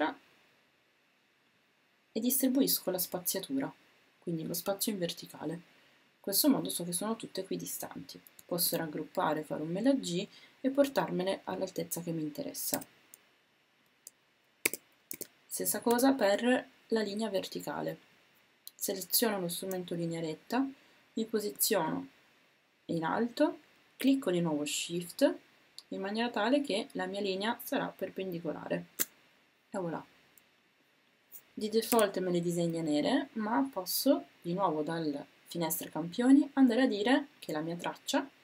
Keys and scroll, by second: 8.6 super+g, 15.1 w, 31.9 w.